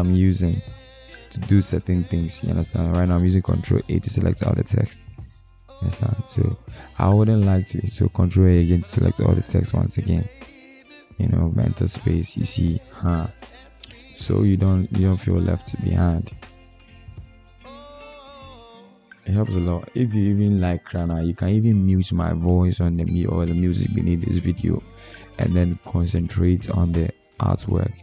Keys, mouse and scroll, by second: 0.7 ctrl+a, 7.4 ctrl+a, 9.9 BackSpace, 10.2 Return, 11.7 ctrl+a.